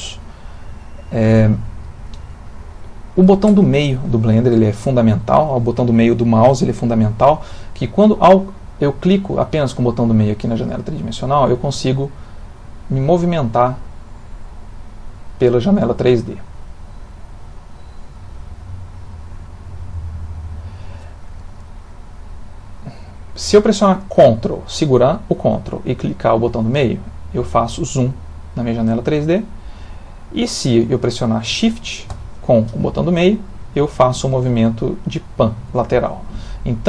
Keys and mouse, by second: 19.1 click, 19.9 click, 21.5 middle click, 26.7 ctrl+middle click, 32.9 shift+middle click.